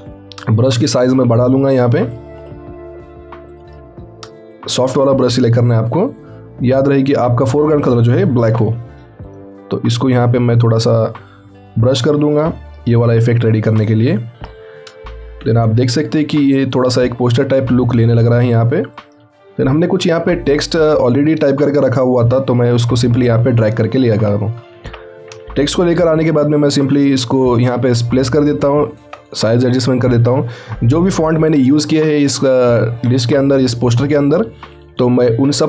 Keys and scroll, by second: 8.6 x, 15.3 ctrl+alt+t, 25.7 ctrl+alt+t.